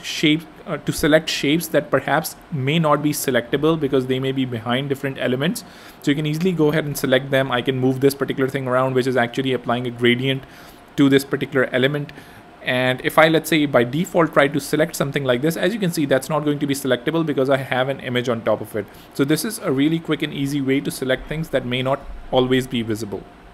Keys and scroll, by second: 1.2 super+y, 9.7 super+z, 12.2 super+y, 13.1 super+y, 15.4 Escape.